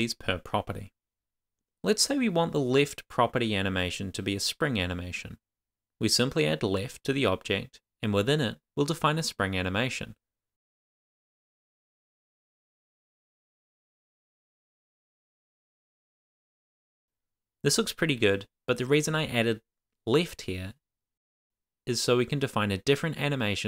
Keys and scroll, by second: 2.2 shift+;, 2.3 shift+', 4.6 super+s, 12.6 Return, 13.1 Tab, 13.6 shift+;, 13.7 shift+space, 14.2 Return, 15.4 shift+;, 15.4 shift+space, 16.0 Return, 16.5 shift+;, 16.7 super+s.